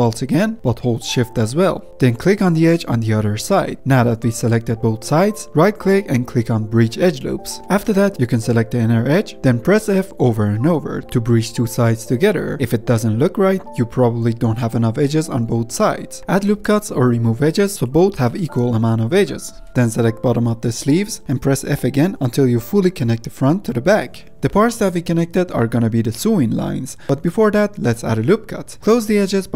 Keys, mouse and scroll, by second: 2.0 alt+shift+click, 7.6 ctrl+z, 8.0 f, 8.6 click, 9.4 f, 9.7-11.1 f, 11.4 middle click, 12.0-12.4 scroll down 1, 12.4 middle click, 12.9 shift+click, 13.1 f, 20.3 click, 21.2 f, 21.4-21.9 f, 22.0 scroll down 1, 22.1 f, 22.3-24.1 f, 24.3 ctrl+z, 24.7-26.0 middle drag, 26.0-26.8 scroll down 2, 26.8 scroll down 1, 26.9 middle click, 27.6-28.1 scroll up 1, 28.1 ctrl+r.